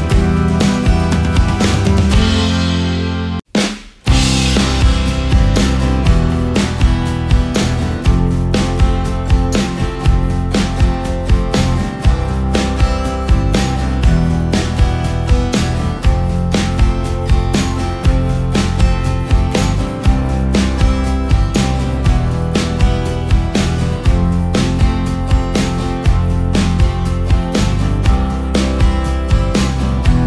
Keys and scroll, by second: 1.1 ctrl+space, 2.1 ctrl+space, 14.6 ctrl+x, 16.1 Delete, 17.1 ctrl+f, 18.1 ctrl+g, 19.0 ctrl+space, 21.6 ctrl+space, 27.3 ctrl+space, 28.0 ctrl+space, 28.7 ctrl+space.